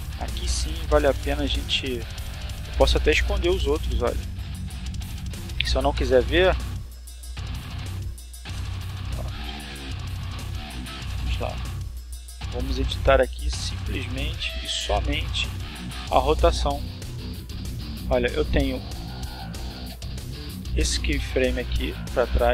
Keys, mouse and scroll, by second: 0.5 click, 0.9 click, 4.1 click, 4.5 click, 4.5 middle click, 5.0 middle click, 6.8-8.9 shift+middle drag, 13.4 middle click, 14.1 shift+middle click, 15.6 click, 16.5 click, 20.0 click, 21.1 right click, 22.4 g.